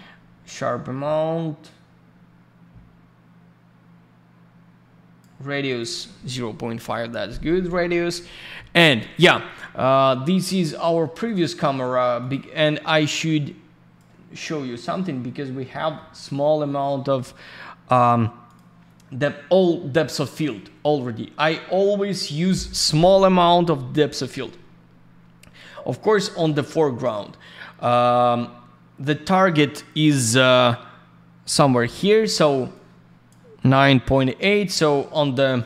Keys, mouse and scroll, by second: 5.6 click, 5.8 click, 8.9 click, 10.0 click, 11.2 click, 11.3 click, 12.2 click, 12.3 click, 13.1 click, 14.4-15.1 scroll up 1, 15.7 middle click, 16.1 scroll down 1, 18.4 click, 18.5 click, 19.9 scroll up 1, 20.5 scroll down 1, 21.4-21.9 scroll up 1, 25.4-26.2 scroll down 1, 27.7 scroll up 1, 28.4-28.9 scroll down 1, 31.4 click, 31.6 click, 32.7 click, 35.4 click.